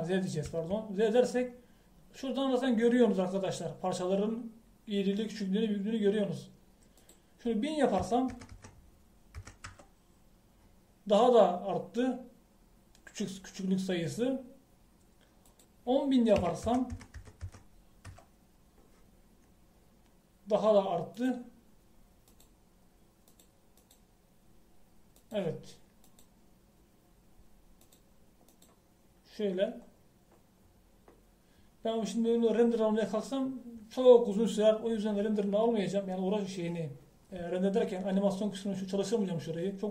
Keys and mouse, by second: 0.3 Tab, 1.5 z, 8.0-9.6 drag, 9.6 KP_0, 16.5-18.0 drag, 18.0 KP_0, 18.5 KP_0, 31.0 click.